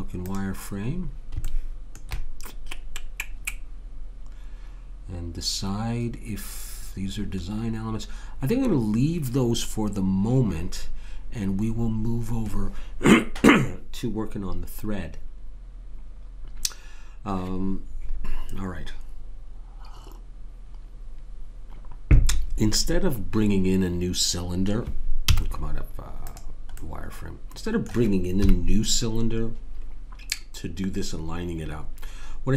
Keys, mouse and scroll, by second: 0.9 middle click, 25.3 z, 28.4 KP_3.